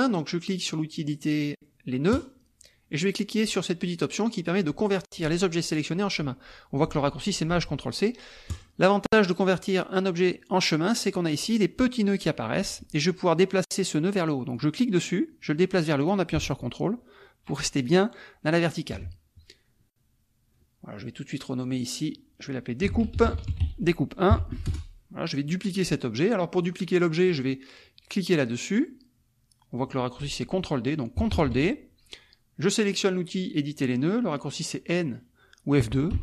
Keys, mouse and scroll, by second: 2.1 click, 8.5 click, 14.5-19.1 drag, 21.2 click, 21.7 click, 22.6-24.3 typing, 24.7 Return, 26.6 click, 31.3 ctrl+d, 36.1 F2.